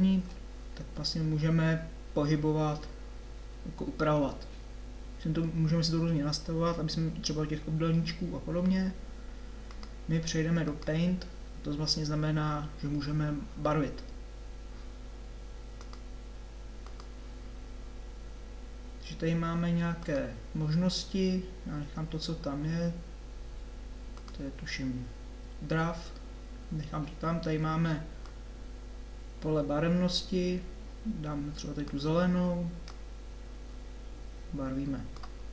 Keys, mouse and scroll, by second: 0.2 Tab.